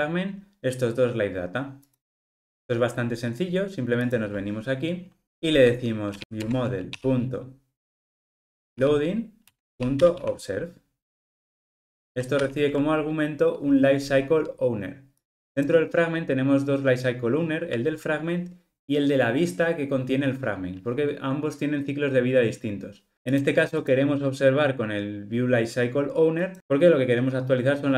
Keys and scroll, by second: 6.2 super+z, 12.3 super+p.